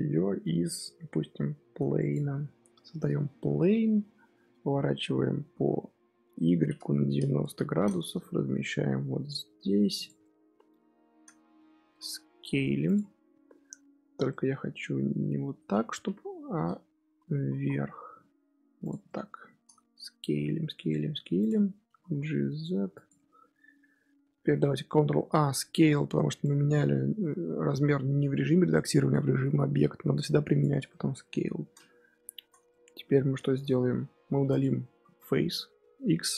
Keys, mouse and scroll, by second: 3.4 KP_1, 5.0 r, 8.2 g, 10.1-11.4 middle drag, 11.4 Tab, 11.8 s, 13.0 Tab, 13.4-14.2 scroll down 1, 14.2-15.6 shift+middle drag, 15.6-16.0 scroll up 2, 16.0 KP_1, 17.3 g, 19.0-20.0 middle drag, 20.0 s, 21.8 g, 23.1-24.1 middle drag, 24.1 Tab, 24.4 Tab, 25.1 ctrl+a, 30.8-31.2 middle drag, 31.2-32.1 scroll up 1, 32.1-33.5 shift+middle drag, 33.5-33.9 scroll up 2, 33.9 Tab, 34.2 3, 34.4 click, 34.9 x.